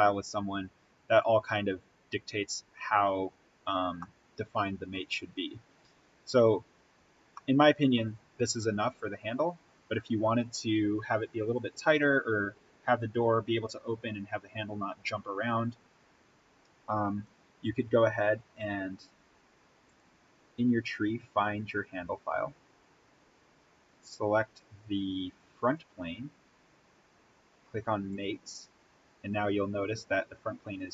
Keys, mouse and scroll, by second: 3.9-7.3 middle drag, 7.3-9.4 middle drag, 9.4-11.3 scroll down 1, 15.9-16.6 scroll down 1, 17.6-17.9 scroll up 1, 19.8 click, 20.4 scroll down 1, 25.6 click, 28.1 click.